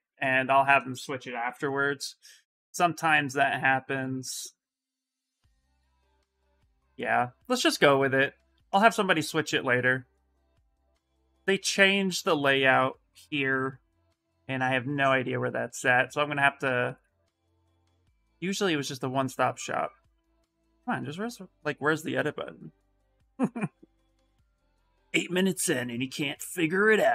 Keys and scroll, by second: 0.0-1.2 typing, 5.3 Return.